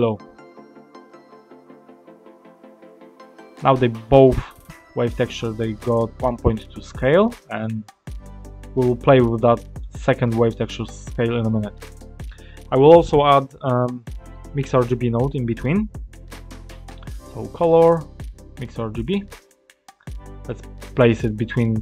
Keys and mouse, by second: 0.3 click, 2.0 click, 4.5-7.5 drag, 9.3 click, 11.3 click, 12.0 click, 14.3 shift+a, 20.4 middle click.